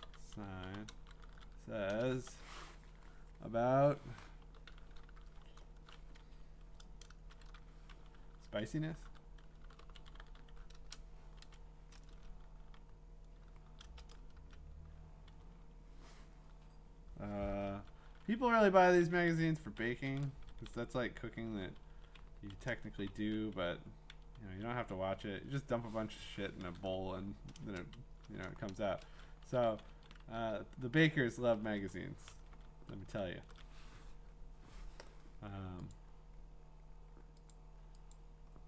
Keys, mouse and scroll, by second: 0.0-2.8 typing, 6.5 typing, 8.4-10.9 typing, 14.4 Return, 18.2 Down, 18.5 Down, 20.1 Up, 20.8 ctrl+v, 22.5 Up, 22.8 Right, 23.1 Down, 23.2 Down, 23.6 Right, 24.1 Left, 24.4 Left, 24.8 Right, 27.6 2, 28.5 BackSpace, 28.7 BackSpace, 29.4 Right, 29.7 Right, 29.9 Right, 30.2 Right, 33.0 ctrl+shift+Left, 33.4 ctrl+shift+Left, 35.9 click, 37.5 click, 38.1 click, 38.5-38.6 scroll.